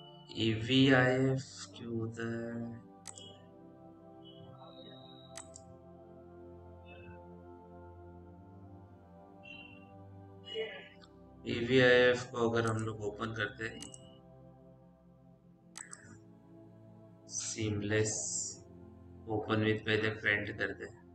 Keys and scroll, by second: 17.2-18.1 typing.